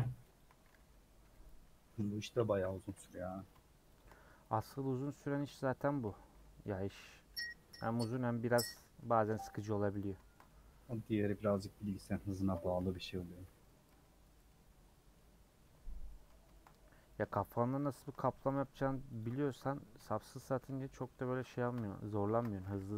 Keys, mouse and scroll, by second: 0.3 shift+click, 2.3 middle click, 2.8 alt+z, 3.3 click, 4.4-7.6 typing, 6.6 middle click, 8.1 Tab, 8.3-8.8 scroll down 3, 9.0 h, 9.3 click, 9.7 Tab, 9.9 middle click, 10.5 scroll up 1, 11.1 click, 11.8 click, 12.5 ctrl+click, 13.0 middle click, 13.4 ;, 13.7 middle click, 14.5 middle click, 15.1-15.6 scroll down 2, 15.6 3, 16.0 scroll down 1, 16.1 middle click, 16.7-17.1 scroll up 2, 17.1-18.5 shift+middle drag, 18.5 click, 20.0 ;, 20.7 3, 21.0 click, 21.4 shift+middle click, 22.3 ctrl+click.